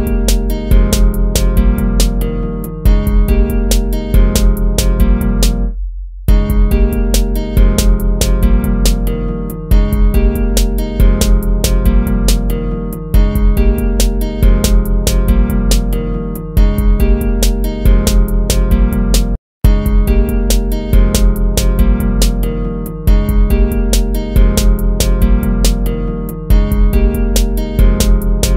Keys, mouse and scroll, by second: 1.6 ctrl+-, 1.7 ctrl++, 1.8 ctrl+-, 2.7 ctrl+z, 3.2 right click, 3.3 ctrl++, 4.0 ctrl+-, 4.3 ctrl++, 5.3 ctrl+-, 6.2 right click, 7.3 ctrl++, 7.9 ctrl+z, 10.7 ctrl+-, 11.6 ctrl+-, 11.8 ctrl+-, 13.5 ctrl+z, 16.3 ctrl+v, 19.3 ctrl+z, 20.4 ctrl+v, 20.5 ctrl+z, 20.7 ctrl+v, 21.3 ctrl+-, 21.5 ctrl+-, 23.3 ctrl+v, 23.4 ctrl+z, 23.6 ctrl+v, 26.7 ctrl+-, 27.1 ctrl+-.